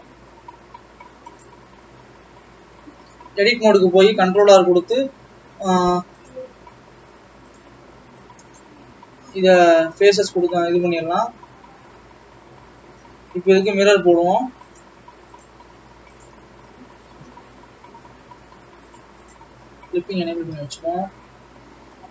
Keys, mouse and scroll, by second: 1.7-2.8 scroll up 6, 2.8 Tab, 4.4 ctrl+r, 6.2 click, 8.0 click, 10.2 x, 15.0 click, 16.1 click, 16.7 a, 17.0 scroll down 2, 19.0 click, 19.7 click, 20.0 scroll up 2, 20.2 scroll down 3, 20.6 g.